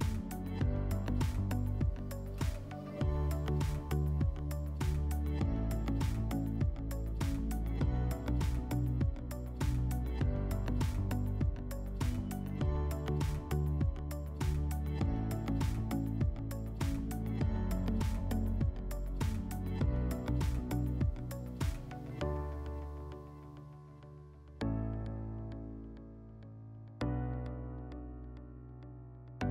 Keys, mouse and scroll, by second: 0.0 click, 0.5 right click, 0.8 right click, 1.5 click, 1.9 click, 2.6 click, 4.5-6.0 typing, 7.6 right click, 8.4 click, 15.8 click, 17.8 w, 19.4 middle click, 20.8 click, 22.6 click, 24.2 click, 25.2 right click, 28.2 click.